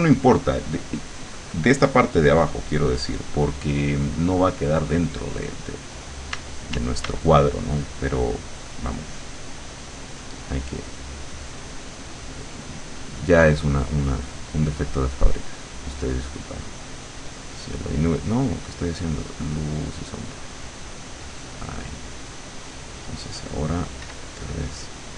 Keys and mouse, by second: 6.4 d, 12.1-14.0 drag, 14.3 click, 16.2 click, 17.3 click, 18.6-19.9 drag, 20.4 click, 24.1 w.